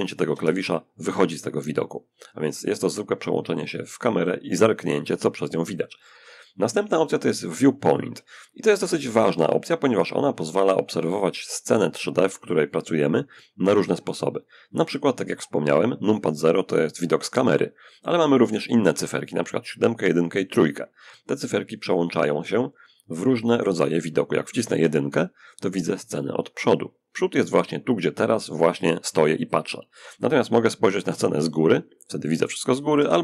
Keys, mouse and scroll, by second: 1.1-2.4 middle drag, 3.0 click, 23.9 1, 30.3 7, 32.2 3.